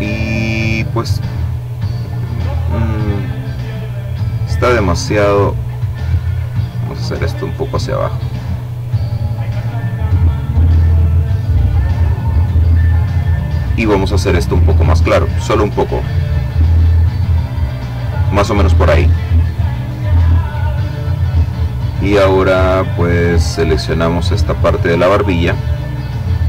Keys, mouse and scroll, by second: 1.3 click, 2.6 click, 5.2-7.7 drag, 8.2-12.5 drag, 14.1-17.1 drag, 22.0 click, 23.1 click, 25.3 click.